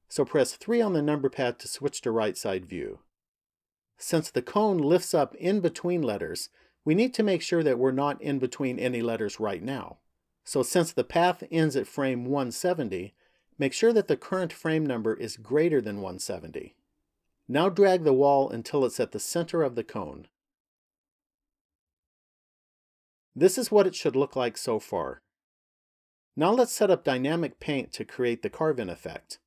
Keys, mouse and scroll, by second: 0.5 KP_3, 2.3-3.7 scroll up 3, 18.9 click, 23.6 middle click.